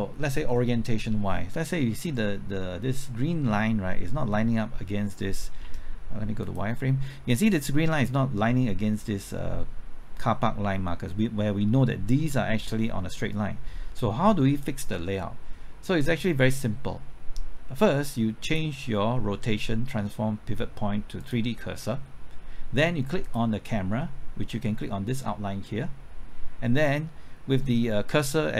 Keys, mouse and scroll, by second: 5.6 z.